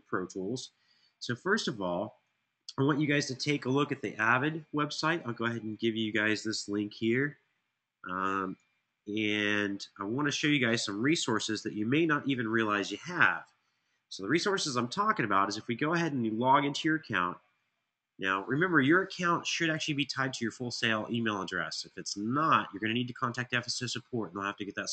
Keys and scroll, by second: 8.6 super+c, 11.2 super+v, 11.7 Return.